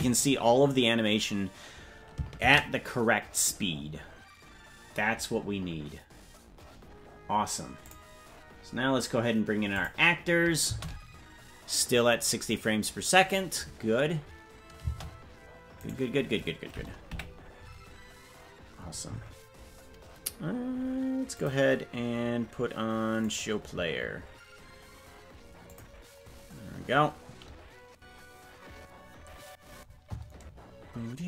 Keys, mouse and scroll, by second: 14.7 space, 15.9 right click, 17.1 KP_Decimal.